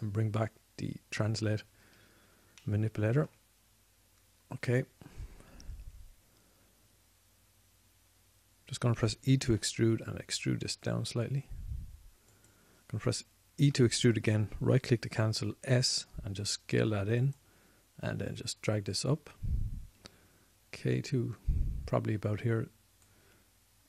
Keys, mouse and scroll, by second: 0.3 ctrl+space, 3.7-8.4 drag, 10.8 e, 13.8-15.4 drag, 16.3 s, 17.3-18.6 drag, 19.6-23.6 drag.